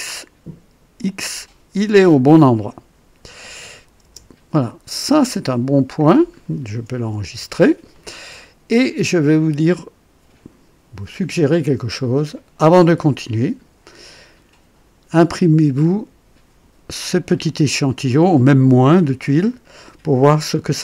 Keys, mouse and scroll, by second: 1.7-2.1 scroll down 1, 2.5 right click, 4.0 KP_0, 4.7-5.0 scroll down 1, 5.4-6.5 drag, 6.2 typing, 7.2 ctrl+s, 7.9-8.6 ctrl+right drag, 9.0-12.2 drag, 12.5 right click.